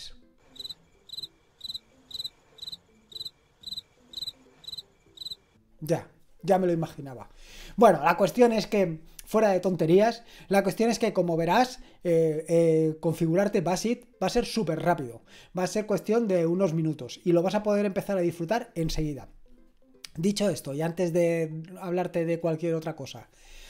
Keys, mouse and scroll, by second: 5.4 click.